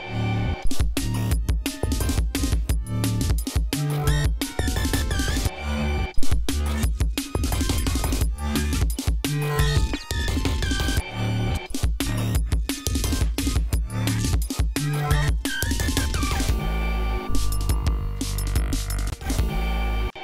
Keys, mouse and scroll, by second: 3.2 scroll up 2, 7.2 ctrl+scroll down 2, 8.9 ctrl+scroll up 2, 9.2 ctrl+scroll down 2, 10.3 ctrl+scroll down 2, 10.6 ctrl+scroll up 2, 11.7 ctrl+scroll down 2, 12.4 ctrl+scroll down 2, 13.4-14.0 ctrl+scroll up 3, 14.3-14.6 scroll down 2, 14.8 ctrl+scroll up 2, 15.1 ctrl+scroll down 2, 15.8 scroll down 2, 19.0 click, 19.4 ctrl+scroll up 2, 20.1 space.